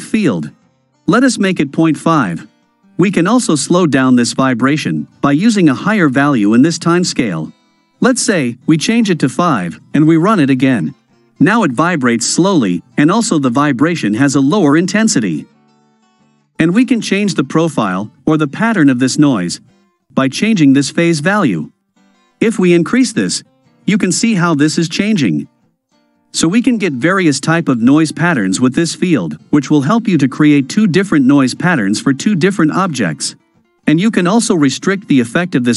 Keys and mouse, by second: 0.5-2.3 drag, 7.8-9.7 drag, 10.1 space, 19.2 space, 21.5 click, 22.3-23.6 drag, 27.2 click, 30.0-32.3 drag.